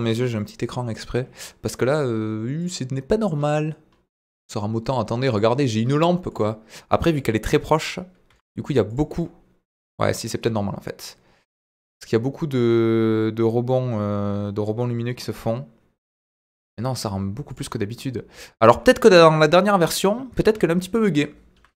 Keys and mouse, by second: 5.3 click, 6.3 click, 7.1 click, 8.3 g, 8.9 click, 9.4-16.6 middle drag, 18.0-18.8 middle drag.